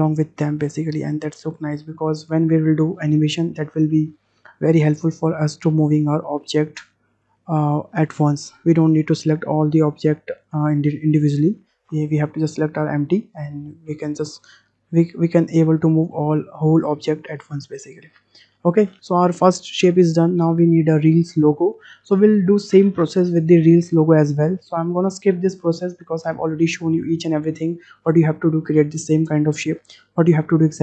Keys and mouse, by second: 1.0-1.5 middle drag, 14.0 click, 15.8 g.